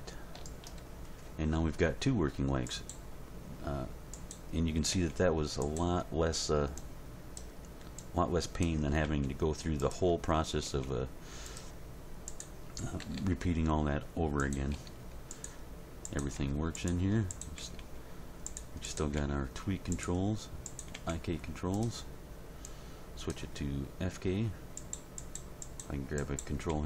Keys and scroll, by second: 4.9 g, 9.0 g, 10.7 g, 13.0 r, 14.7 r, 16.3 r, 17.8 g, 19.2 g, 20.9 g, 26.7 g.